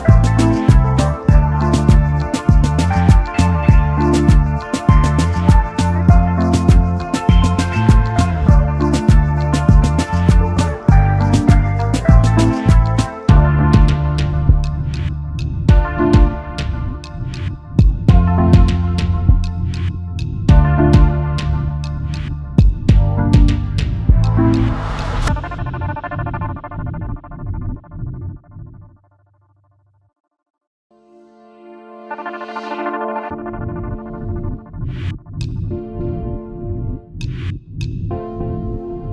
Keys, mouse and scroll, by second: 3.1-4.0 typing, 8.1 ctrl+g, 8.8 space, 8.9 double click, 12.7 alt+shift+click, 16.2 double click, 17.3 alt+scroll up 1, 21.7 alt+click, 23.6 double click, 23.7 space, 23.8 double click, 24.1 space, 25.5 typing, 26.5 typing, 27.7 alt+scroll down 1, 28.2 space, 30.5 alt+scroll up 1, 31.7 alt+scroll down 1, 32.5 right click, 33.9 alt+scroll down 1, 34.7 typing, 37.0 typing.